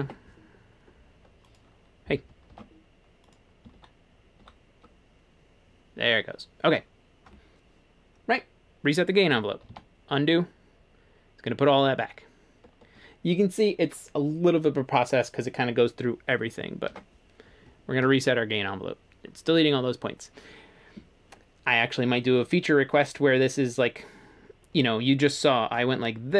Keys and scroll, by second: 0.0 ctrl+r, 2.5 ctrl+r, 3.7 ctrl+r, 9.7 super+z, 16.9 ctrl+r.